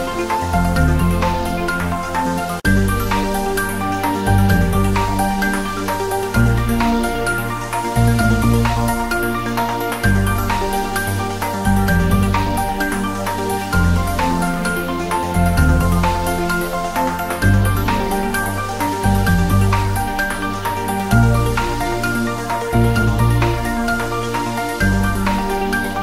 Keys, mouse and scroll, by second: 0.2 click, 0.6 3, 1.0 alt+shift+click, 1.8 2, 3.0 click, 6.1 click, 6.8-7.4 scroll up 1, 7.7 alt+e, 8.0 click, 8.9 click, 9.3 s, 10.5 click, 10.6 ctrl+z, 10.9 click, 11.0 scroll up 1, 11.3 ctrl+z, 11.8 click, 12.0-12.6 scroll down 1, 12.8 click, 13.1 3, 13.3 click, 13.7 alt+shift+click, 16.1 alt+e, 16.4 click, 19.0 click, 19.2 Tab, 19.4 scroll down 1, 20.2 click, 20.4 scroll down 1, 20.8 scroll up 1, 21.5 Tab, 21.7 scroll up 1, 22.1 ctrl+r, 22.4 click, 23.3 click, 23.5 ctrl+r, 23.7 click, 25.2 click, 25.4 Tab, 25.6 scroll down 1.